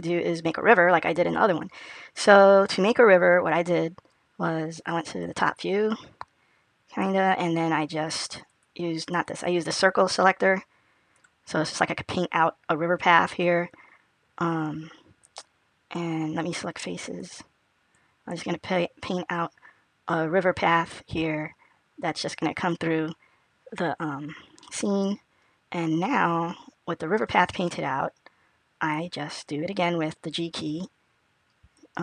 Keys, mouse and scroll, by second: 4.7 click, 6.5-7.0 scroll down 2, 8.3 click, 9.0 click, 9.7 click, 13.4 click, 18.0 click, 24.4 middle click.